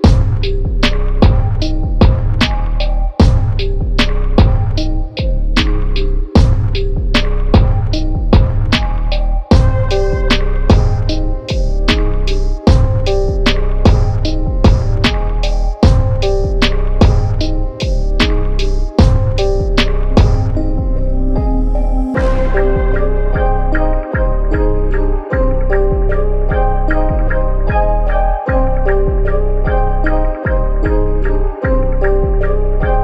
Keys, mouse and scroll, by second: 2.0 s, 3.9 e, 5.2 s, 6.1 e, 8.4 s, 9.3 e, 10.8 scroll down 2, 11.1-11.4 scroll up 1, 11.4 e, 12.7 s, 13.4 e, 14.7 s, 15.8 Tab, 16.2 click, 16.5 middle click, 17.2 click, 17.4 scroll up 1, 17.7 middle click, 18.5 Tab, 18.7 scroll down 1, 18.9-20.3 middle drag, 20.3 click, 22.3 click, 23.2-24.7 middle drag, 24.7 shift+click, 25.4 shift+click, 26.0 shift+click, 26.4 shift+click, 26.6 shift+click, 26.9 middle click, 27.7-30.2 right drag, 30.2 scroll down 1, 30.3-31.3 middle drag, 31.3 s, 32.8 click.